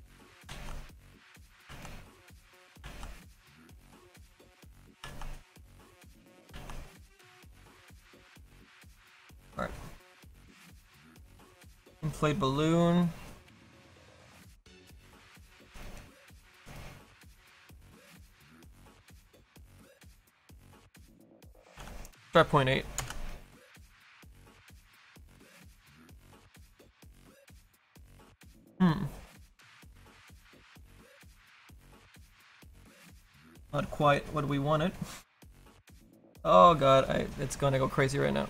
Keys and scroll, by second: 0.4 ctrl+z, 1.7 ctrl+z, 2.8 ctrl+z, 6.5 ctrl+z, 21.9 KP_8, 32.6 ctrl+z.